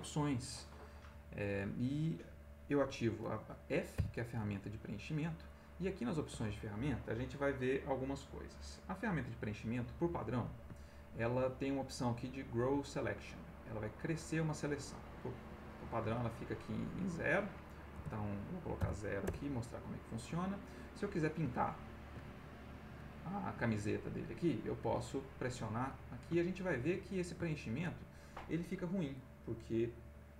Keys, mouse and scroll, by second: 1.8 middle click, 3.9 f, 5.4 click, 8.9 click, 10.2 middle click, 10.8 ctrl+middle click, 11.7-15.9 drag, 16.5 ctrl+right click, 17.9 BackSpace, 18.8 0, 19.2 Return, 20.4 middle click, 21.9 ctrl+click, 22.7 middle click, 24.8 click, 25.5 middle click, 26.1-28.0 ctrl+middle drag, 28.6 middle click.